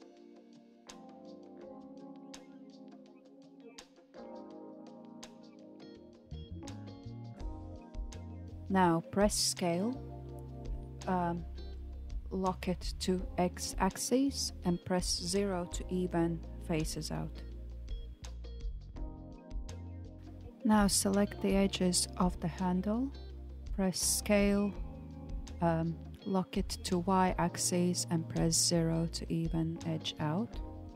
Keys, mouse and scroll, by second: 3.1 e, 12.4 s, 16.0-20.2 shift+middle drag, 20.2 click, 22.6 s, 25.3-26.4 middle drag, 26.4 click, 26.9 alt+click, 29.0 s.